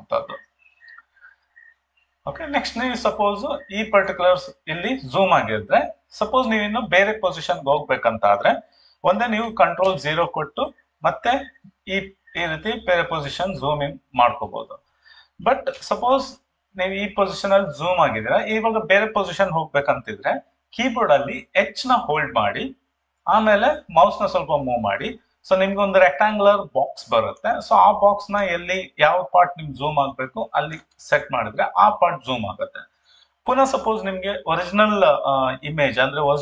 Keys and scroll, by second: 9.8 ctrl+0, 22.4 h.